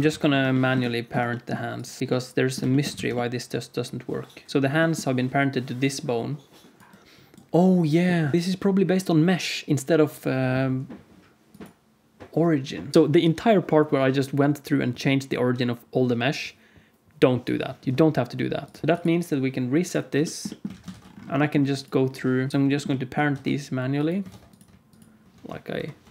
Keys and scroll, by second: 0.1 ctrl+s, 2.0 KP_Decimal, 2.8 alt+z, 5.1 d, 6.7 d, 7.3 d, 7.4 d, 12.9 alt+z, 18.8 space, 18.8 alt+a, 18.8 ctrl+s, 20.6 alt+a, 20.9 ctrl+s, 22.5 ctrl+p, 23.2 ctrl+Tab, 24.2 ctrl+Tab, 25.7 ctrl+p.